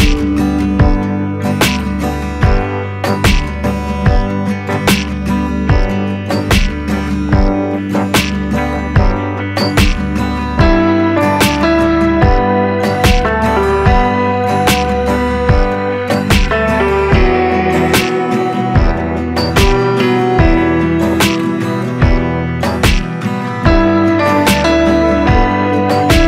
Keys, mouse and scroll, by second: 2.2 click, 6.6-16.1 drag, 16.2-21.9 drag, 21.9-26.2 shift+drag.